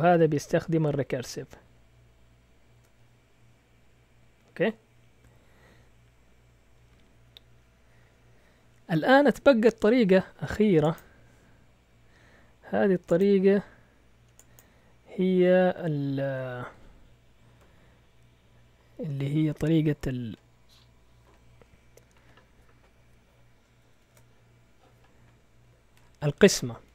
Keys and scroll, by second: 24.0 shift+super+z.